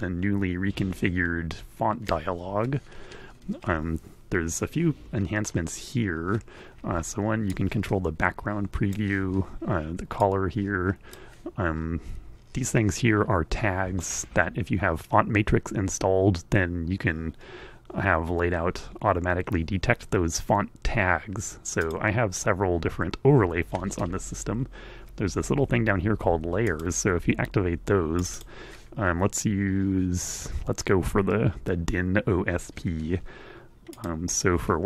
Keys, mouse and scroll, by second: 7.2-8.8 drag, 9.8-11.0 drag, 20.1-21.7 drag, 25.7 click, 27.3 click, 33.4 click.